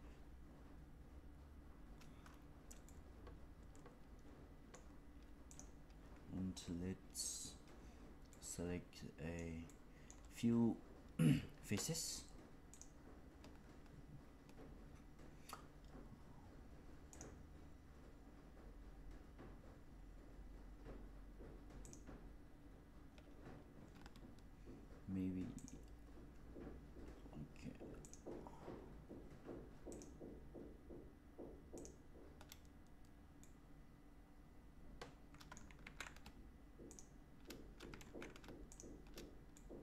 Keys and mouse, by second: 2.8-4.7 middle drag, 8.2-9.3 middle drag, 9.6 middle click, 12.6 shift+click, 17.1 shift+click, 21.7 shift+click, 25.5 shift+click, 33.3-35.5 middle drag, 35.7 ctrl+z, 37.9 ctrl+z, 38.7 shift+click, 39.5-39.8 middle drag.